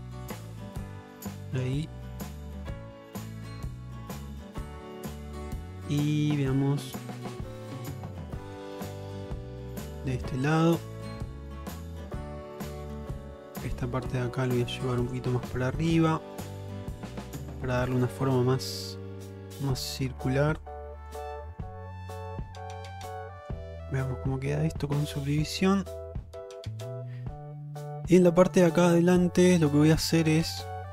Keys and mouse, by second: 0.2 click, 1.4 click, 2.3 click, 2.9 click, 3.6 click, 4.3 click, 4.8-6.1 middle drag, 6.4 shift+middle click, 6.8 middle click, 8.2 click, 8.9 click, 9.6 click, 10.3 click, 10.9-12.6 middle drag, 13.1 shift+middle click, 13.9 click, 14.8 click, 15.7 shift+middle click, 16.6 click, 17.2 click, 19.1 middle click, 20.7 click, 21.5 click, 22.1 middle click, 24.0-27.9 middle drag, 28.2 shift+middle click, 29.0 middle click.